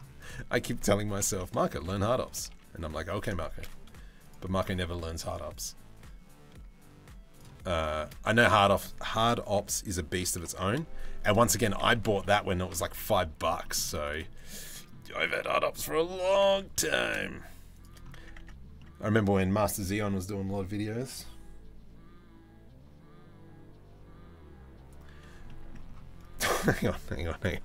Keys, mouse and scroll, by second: 0.8 ctrl+l, 1.4 KP_7, 2.1 KP_1, 2.6 Tab, 3.1 shift+s, 5.3-7.0 drag, 7.5 shift+middle click, 7.9 Tab, 10.0 ctrl+l, 10.7 shift+d, 11.2 s, 13.2 shift+middle click, 13.6 click, 14.3 middle click, 14.7 3, 14.9 click, 15.0 middle click, 15.9 g, 18.0 Tab, 18.4 middle drag, 25.1 middle drag.